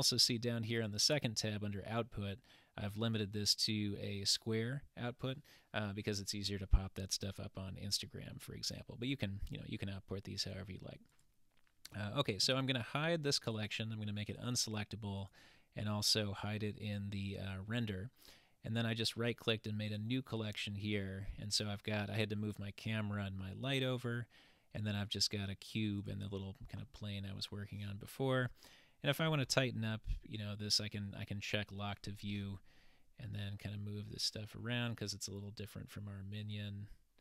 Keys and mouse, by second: 0.8 click, 13.6 click, 14.4 click, 15.2 click, 18.9-19.8 right drag, 19.9 click, 20.9 click, 26.0 click, 33.4-34.9 shift+middle drag.